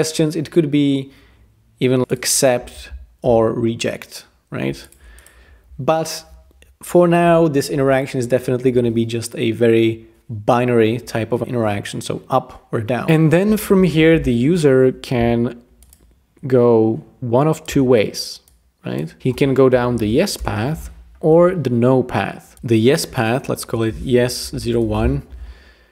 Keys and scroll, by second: 3.2 Escape, 19.2-20.5 typing, 23.7 Tab, 24.1-25.0 typing.